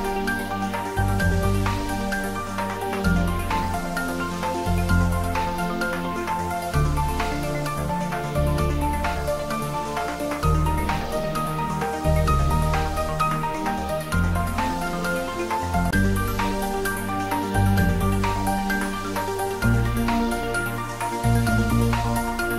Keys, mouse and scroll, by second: 4.4 click, 4.8-5.7 scroll up 1, 7.5 click, 8.3 3, 8.6 click, 11.6-12.1 alt+shift+scroll down 1, 12.1-13.0 middle drag, 13.4 e, 15.9 click, 16.3-18.5 middle drag, 19.4 scroll up 1, 20.3 click, 20.4 click, 21.9 2, 22.0 click.